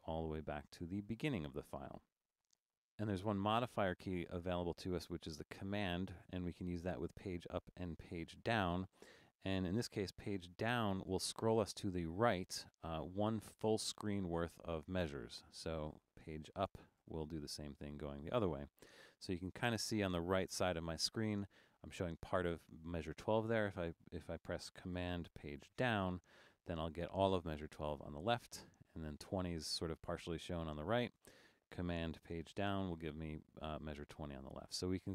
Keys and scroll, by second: 11.2 super+?, 17.2 super+?, 26.0 super+?, 31.3 super+?, 34.6 super+?.